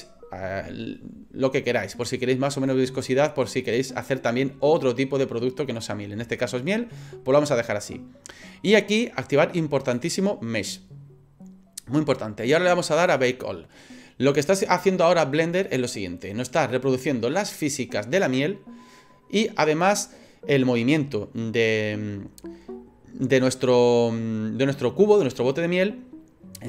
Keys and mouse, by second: 10.0 click.